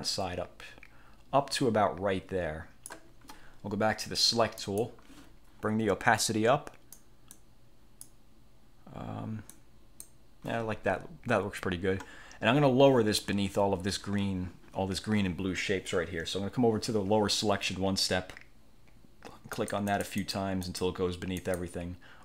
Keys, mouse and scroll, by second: 4.7 click, 6.3-7.2 drag, 7.4-8.3 drag, 9.6-10.3 drag, 19.6 click, 20.8 click, 21.5 click.